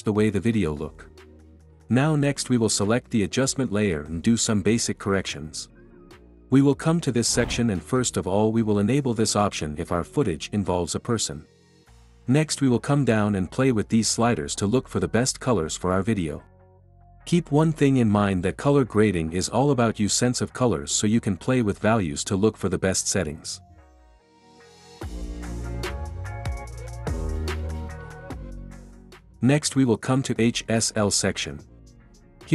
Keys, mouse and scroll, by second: 0.9-1.9 drag, 2.8-4.8 drag, 5.0 click.